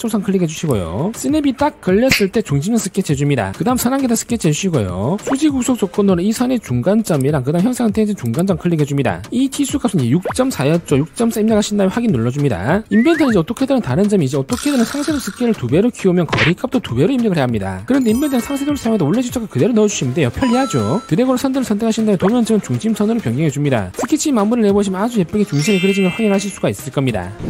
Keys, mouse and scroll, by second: 1.0 click, 2.9 click, 4.1 click, 6.1 click, 7.4 click, 9.1 click, 9.8 click, 10.2 click, 10.9 4, 12.3 click, 12.8 click, 21.6 click, 22.9 click, 23.4-23.7 scroll up 2, 25.3 click.